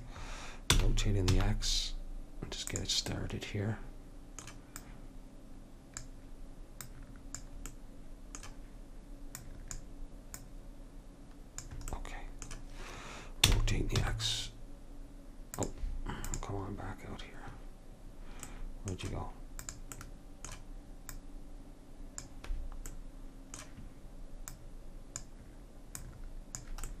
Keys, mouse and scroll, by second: 0.9 r, 3.3-4.4 middle drag, 4.9-6.8 drag, 7.0-8.8 drag, 7.9-8.9 middle drag, 9.6-12.4 drag, 13.6 r, 16.4-18.3 drag, 18.6-19.8 middle drag, 19.8-23.1 drag, 23.1-24.6 middle drag, 24.6-27.0 drag.